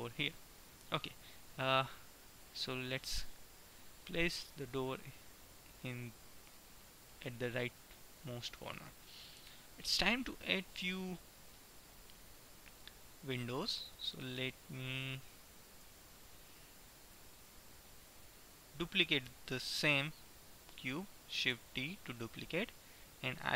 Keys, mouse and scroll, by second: 0.7-2.3 middle drag, 7.2-10.2 middle drag, 15.2 KP_1, 21.7 shift+d.